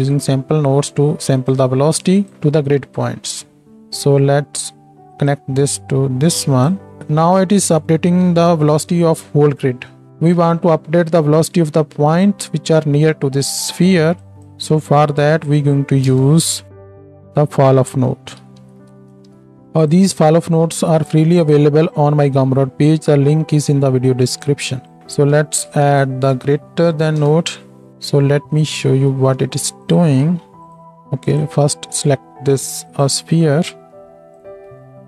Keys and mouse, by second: 2.2 click, 2.3-5.3 middle drag, 3.4 Tab, 3.7 ctrl+space, 5.3-19.9 drag, 19.9-29.2 middle drag, 20.1-29.2 right drag, 23.1-29.2 drag, 30.0-31.4 ctrl+shift+drag, 30.8-33.9 shift+middle drag, 30.8-33.9 shift+right drag, 33.9-35.0 shift+drag, 34.5-35.0 shift+middle drag, 34.5-35.0 shift+right drag.